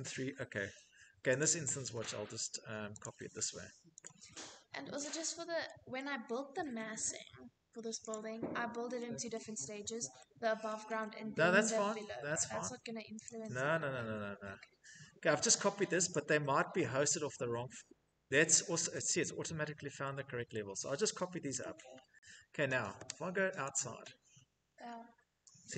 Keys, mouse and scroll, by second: 0.0 middle click, 0.2 middle click, 0.2 Escape, 0.3 click, 1.0 right click, 2.2 scroll, 2.6 right click, 3.6 click, 4.6 click, 5.5 scroll, 7.7 click, 8.1 scroll, 8.9-9.7 scroll, 10.2 middle click, 10.5 middle click, 10.5 middle click, 10.6 middle click, 12.8 click, 13.5 middle click, 13.5 middle click, 13.6 middle click, 14.4 Escape, 14.7 Escape, 14.9 Escape, 15.7 click, 20.2 middle click, 20.3 Escape, 21.2 middle click, 21.5 middle click, 21.6 middle click, 21.7 middle click, 22.1 Escape, 23.3 click, 24.2 middle click, 24.3-25.7 middle click, 24.4-25.1 scroll, 25.3 Escape, 25.5 Escape.